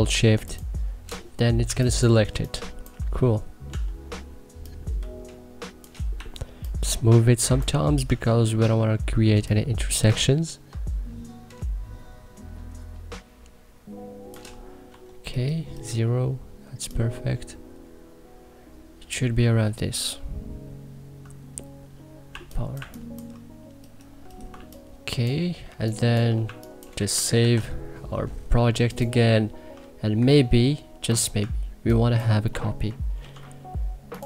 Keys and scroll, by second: 1.4 1, 2.0 3, 3.4 t, 5.9 e, 7.7 t, 14.6 e, 22.0 2, 22.5 1, 24.2-26.1 typing, 27.1 ctrl+s, 32.9 alt+g.